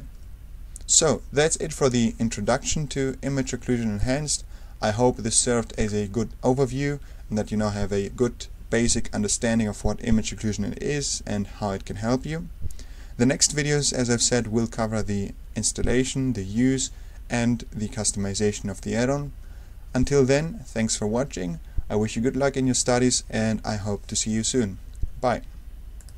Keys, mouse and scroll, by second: 0.0 super+1, 3.9 click, 5.7 ctrl+super+middle click, 25.9 click.